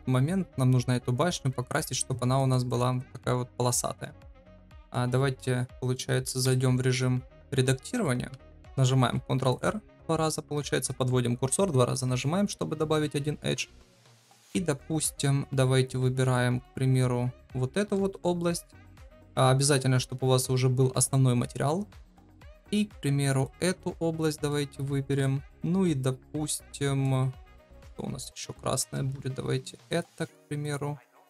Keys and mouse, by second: 1.5 middle click, 4.3 middle click, 6.4 KP_Divide, 8.3 Tab, 8.5 Tab, 8.5 ctrl+r, 9.0 ctrl+r, 14.3 click, 14.3 3, 24.4-26.4 shift+middle drag, 26.5 shift+middle click, 29.8-31.2 alt+shift+drag.